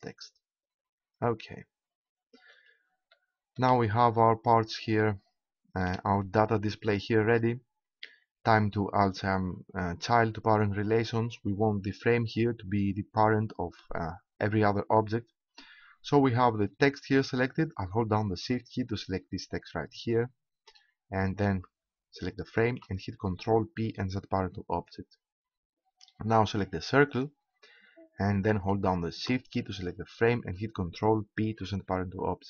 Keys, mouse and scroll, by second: 3.1-6.9 middle drag, 20.0-21.9 right drag, 22.5-24.2 right drag, 23.9 ctrl+p, 27.2-28.8 right drag, 30.1-31.5 right drag, 31.5 ctrl+p.